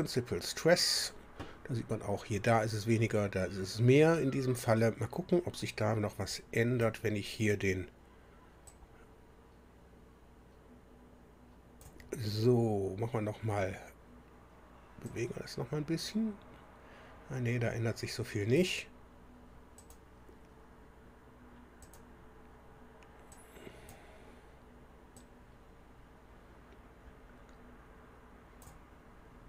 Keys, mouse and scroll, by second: 0.0 click, 6.3-7.0 drag, 8.6-12.0 drag, 15.0-18.7 drag, 19.8 click, 21.8 click, 23.3-24.0 drag, 25.2-28.8 drag.